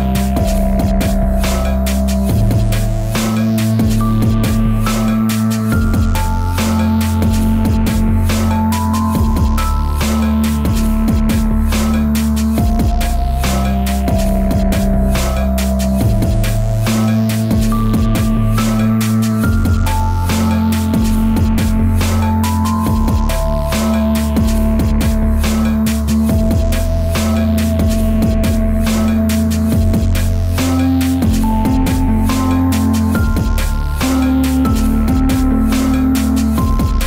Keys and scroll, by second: 26.8 Return.